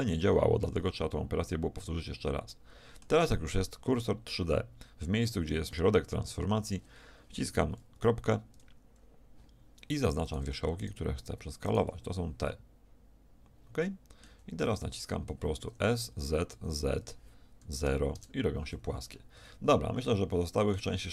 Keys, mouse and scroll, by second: 1.7-8.0 middle drag, 8.0 ., 10.3-12.0 middle drag, 12.0 right click, 12.1 middle click, 12.2 right click, 12.4 right click, 14.3 z, 14.7-16.5 middle drag, 19.1 middle click, 19.4 a.